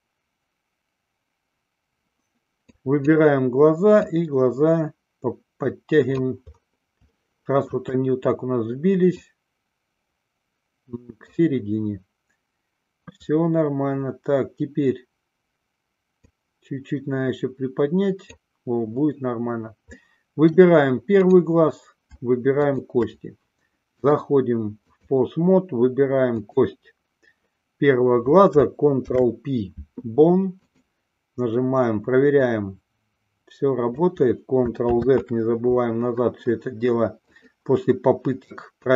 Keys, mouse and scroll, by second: 3.1 click, 4.2-6.5 drag, 7.3-8.1 shift+middle drag, 9.3-11.6 drag, 16.6-18.7 drag, 20.1-20.7 middle drag, 21.6 click, 23.0 shift+click, 24.2-25.4 drag, 29.3 ctrl+p, 32.6-34.3 drag, 35.6 ctrl+z, 37.6 click.